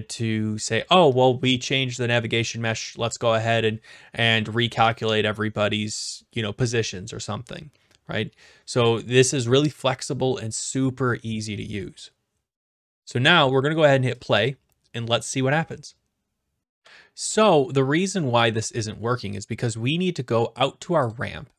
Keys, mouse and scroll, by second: 14.2 click, 16.6 click, 21.1 click.